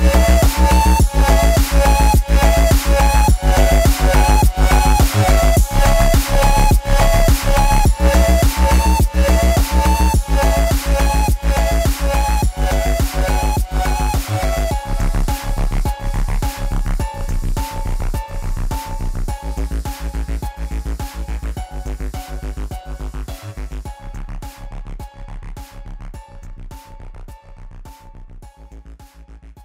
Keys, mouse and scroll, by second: 3.0 double click, 8.1 ctrl+space, 8.2 ctrl+click, 8.5 ctrl+space, 8.8 ctrl+click, 9.2 alt+space, 9.3 alt+click, 10.1 ctrl+t, 10.8 alt+shift+click, 15.0 double click.